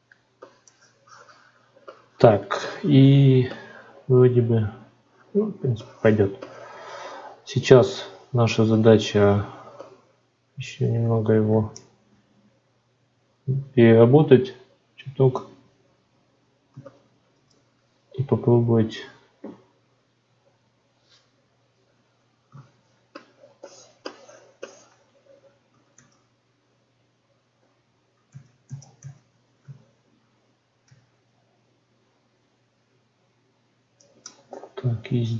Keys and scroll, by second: 11.3 ctrl+r, 25.8 ctrl+z, 28.1 ctrl+z.